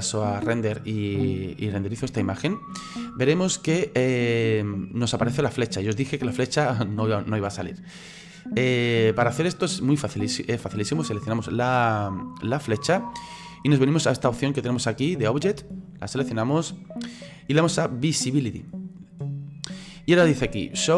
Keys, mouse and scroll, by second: 0.4-3.4 drag, 10.9 right click, 15.9 click, 18.9 click.